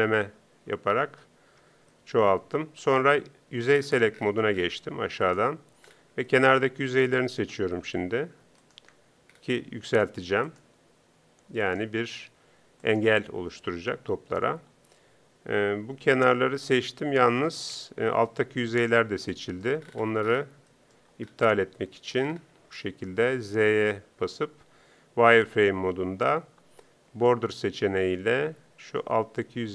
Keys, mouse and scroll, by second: 0.7 t, 17.7 KP_3.